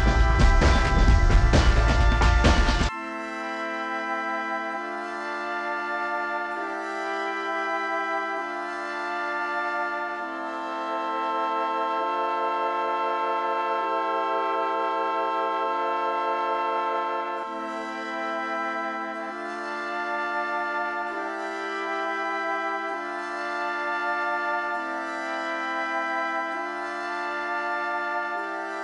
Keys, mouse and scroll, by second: 0.2 middle click, 0.2-0.6 scroll down 23, 0.6 middle click, 0.6 Escape, 0.8 middle click, 0.9 middle click, 1.4 shift+middle click, 1.5 middle click, 1.6 middle click, 1.7 middle click, 2.4 scroll up 19, 2.6 middle click, 2.9 double click, 3.1 double click, 3.3 middle click, 3.5 shift+middle click, 3.6 scroll down 3, 3.7 m, 4.3 middle click, 4.9 s, 5.0 scroll up 10, 5.1 middle click, 5.3 middle click, 6.9 middle click, 6.9 shift+scroll down 4, 7.0 shift+middle click, 7.1 s, 7.3 scroll up 5, 7.4 middle click, 7.5 middle click, 8.5 scroll down 3, 8.6 space, 8.9 middle click, 9.0 scroll down 11, 9.3 middle click, 9.5-10.1 scroll up 23, 10.0-10.8 typing, 10.9 scroll down 8, 11.3 shift+middle click, 11.8 shift+middle click, 12.0-12.3 scroll down 11, 12.5 shift+middle click, 12.7 Up, 13.1 space, 13.3-13.7 scroll down 6, 13.6 middle click, 13.7 shift+middle click, 13.8 scroll up 20, 14.3 middle click, 14.6 y, 14.9 scroll up 13, 16.4-17.0 scroll down 16, 17.0 shift+middle click, 17.2 scroll up 8, 19.3 middle click, 19.5 middle click, 19.6 scroll down 18, 19.9 middle click, 20.0-20.5 scroll up 14, 20.1 ctrl+click, 20.2 shift+middle click, 20.8 scroll down 3, 21.3 shift+middle click, 21.6 shift+middle click, 21.9 scroll up 3, 22.0 scroll down 13, 22.2 middle click, 22.4 middle click, 22.5 middle click, 22.9 ctrl+click, 23.2 shift+click, 23.3-24.1 scroll up 18, 23.3 space, 24.1 middle click, 24.3 s, 25.2 scroll up 4, 25.4 j, 25.5 middle click, 25.9 scroll up 7, 26.8 scroll down 2, 26.9 middle click, 27.3 space, 27.4 m, 27.6 scroll up 2, 27.6 middle click, 28.3 scroll up 8, 28.3-28.7 scroll down 35, 28.7 middle click.